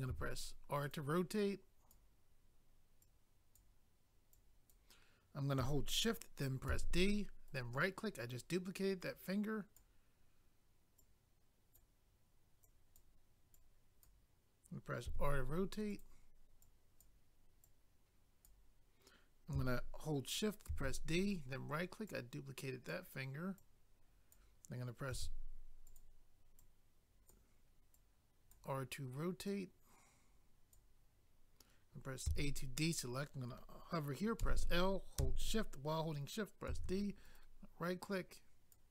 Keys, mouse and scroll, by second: 0.1 r, 0.8 click, 0.9 click, 1.4 click, 3.0 click, 4.3 click, 7.5 right click, 7.5 right click, 9.0 click, 11.0 click, 12.6 click, 13.5 click, 15.1 r, 15.9 click, 16.0 click, 16.6 click, 17.6 click, 21.2 right click, 21.3 right click, 22.1 click, 23.6 click, 25.1 r, 25.9 click, 26.0 click, 26.6 click, 27.9 click, 29.4 click, 32.3 a, 34.4 i, 37.2 right click, 37.4 right click.